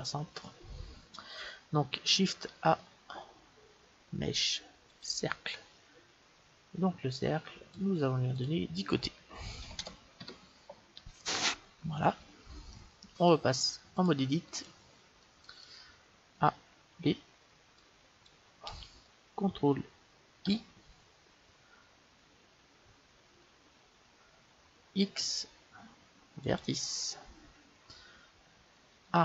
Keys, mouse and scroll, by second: 2.4 shift+a, 7.1-10.1 drag, 12.7-13.9 middle drag, 13.9-15.8 drag, 15.1 middle click, 16.2 a, 16.8 b, 20.4 ctrl+i, 24.9 x, 29.0 a.